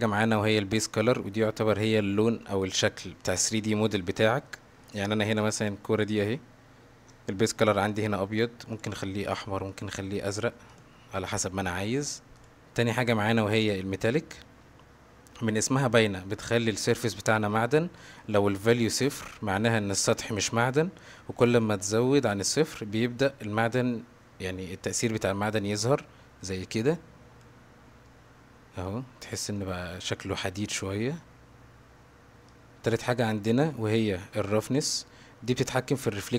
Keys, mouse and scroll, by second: 2.5-4.5 middle drag, 4.8 click, 7.9 click, 10.7 drag, 12.4 click, 25.7-27.4 drag, 28.1-28.8 middle drag, 29.6-30.8 middle drag, 32.6 click, 34.9-36.3 drag.